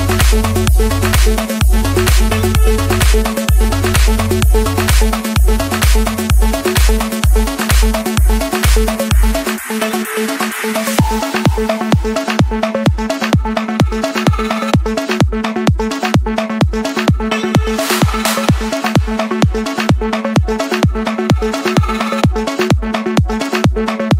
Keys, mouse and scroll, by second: 0.1-0.9 scroll, 1.4 Return, 3.8-4.7 typing, 6.4 click, 7.6 click, 8.2 click, 8.3 Return, 8.5 Return, 9.0 Return, 9.9 click, 10.3 Return, 10.8 Return, 11.5 middle click, 13.1 click, 15.0 click, 15.8 click, 16.6 click, 17.4 click, 17.8 click, 18.2 click, 18.6 click, 19.0 click, 19.4-19.9 scroll down 4, 19.9-20.3 scroll up 7, 20.5 scroll, 20.6 scroll up 4, 20.7 scroll, 20.8 scroll up 4, 20.9 Escape, 20.9-21.9 scroll, 22.8-23.6 typing.